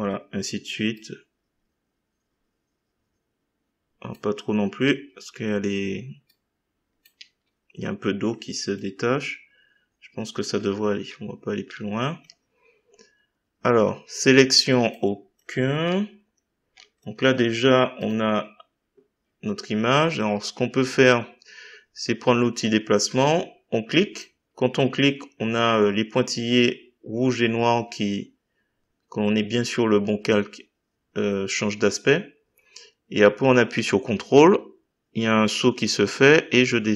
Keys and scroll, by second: 4.8 Delete, 7.1 Delete.